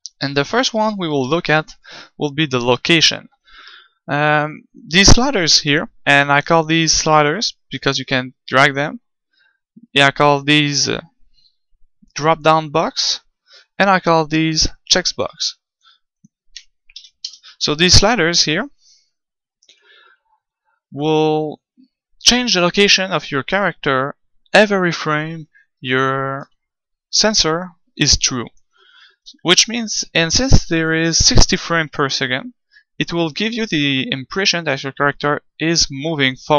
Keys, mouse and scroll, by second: 29.4-30.9 middle drag, 33.8-35.5 drag.